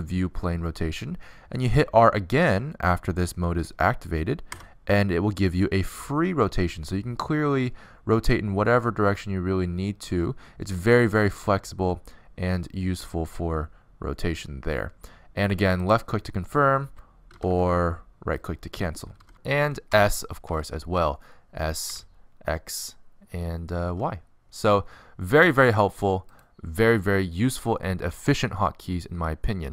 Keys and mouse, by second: 18.1 r, 21.3 s, 23.6 alt+r, 24.0 s, 26.0 s, 27.6 s.